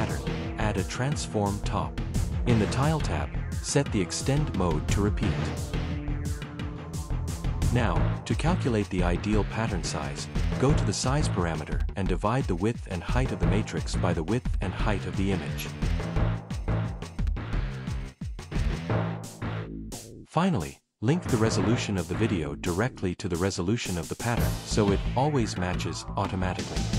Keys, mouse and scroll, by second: 0.2 a, 0.5 click, 0.8 click, 12.1 BackSpace, 12.9 ctrl+v, 14.6 click, 14.9 click, 15.4-19.3 typing, 16.1 ctrl+v, 19.3 Return, 19.6 Return, 21.8 click, 22.0 click.